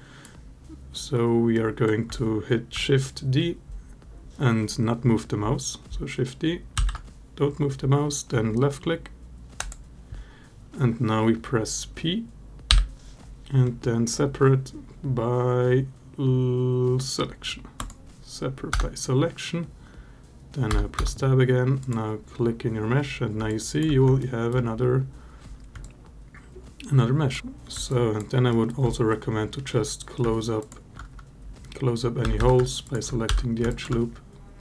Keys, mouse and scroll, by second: 1.3 alt+middle click, 6.6 shift+d, 9.4 click, 12.5 p, 18.6 Tab, 20.5 Tab, 20.8 Tab, 23.3-23.6 alt+drag, 23.6 alt+middle click, 24.0 alt+middle drag, 25.6-27.1 alt+drag, 27.4 Delete, 27.7 alt+click, 28.3 alt+middle click, 30.4 alt+shift+click, 32.0 a, 32.2 a, 32.6 alt+shift+click, 33.1 f, 33.5 alt+click.